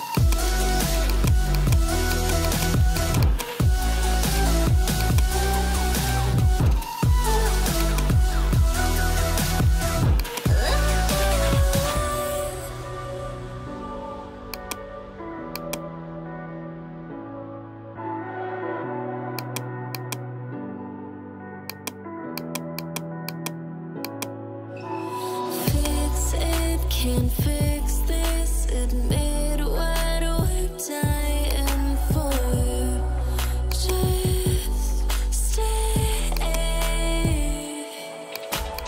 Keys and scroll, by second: 17.8 [, 28.3 ], 30.8 [.